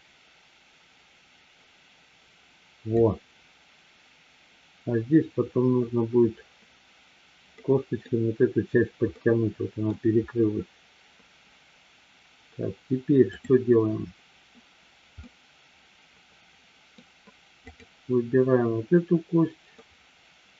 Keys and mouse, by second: 7.7 middle click, 9.2-9.9 middle drag, 15.3-16.9 middle drag, 19.8-20.5 middle drag.